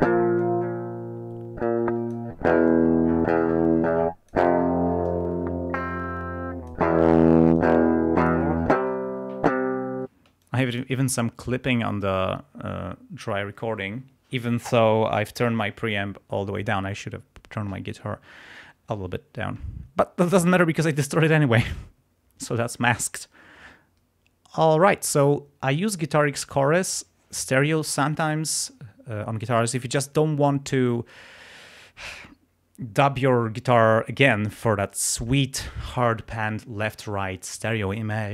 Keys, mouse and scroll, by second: 1.5 click, 2.7 click, 5.2-6.9 drag, 7.6 click, 10.0 space, 10.3 click, 10.6 click.